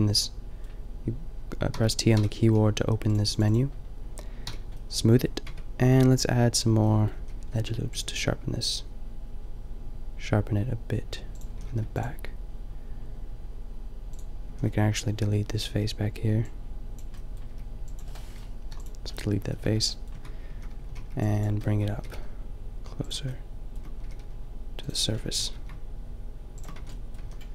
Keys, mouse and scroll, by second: 1.7 t, 2.2 t, 4.4 t, 5.2 middle click, 5.5 Tab, 6.7 a, 7.2 a, 7.6 ctrl+r, 11.5 a, 11.6 ctrl+r, 13.2 click, 14.5 a, 15.7 b, 17.5 b, 18.6 Delete, 19.7 Tab, 20.2 Tab, 20.6 a, 20.9 a, 21.1 b, 21.9 g, 23.1-24.6 drag, 24.0 g, 24.9 click, 25.0 middle click, 25.4 g, 26.7 Tab, 27.2 a.